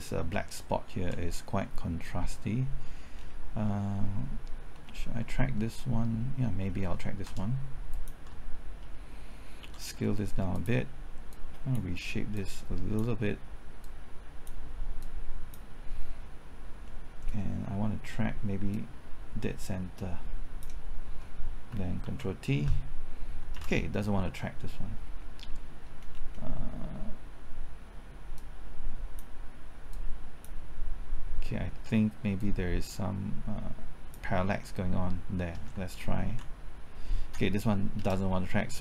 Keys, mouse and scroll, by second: 0.3 typing, 3.1-6.1 scroll down 1, 6.1 scroll up 1, 7.0 typing, 7.9 ctrl+click, 9.6 s, 10.5 click, 13.8-14.9 drag, 14.9 click, 16.8-17.9 middle drag, 17.9 middle click, 18.7-20.9 drag, 20.9 click, 21.7 typing, 22.0 ctrl+t, 23.3 typing, 23.5 ctrl+z, 25.8-26.6 scroll down 1, 28.3-34.9 drag, 35.7 typing, 36.5 ctrl+t, 37.7 typing, 37.9 ctrl+z.